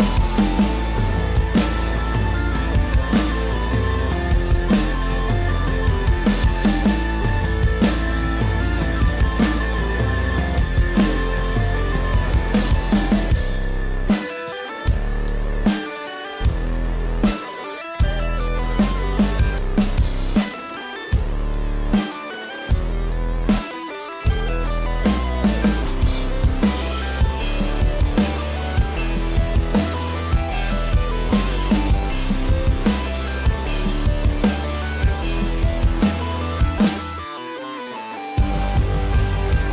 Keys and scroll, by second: 11.3 ctrl+-, 13.1 ctrl+=, 19.1 space, 24.9 ctrl+=, 25.2 ctrl+-, 26.0 ctrl+=, 26.3 ctrl+-, 27.9 ctrl+=, 28.1 ctrl+-, 29.1 space, 33.3 ctrl+-, 33.6 ctrl+=, 36.4 ctrl+-, 36.7 ctrl+=, 39.1 ctrl+-, 39.3 ctrl+=.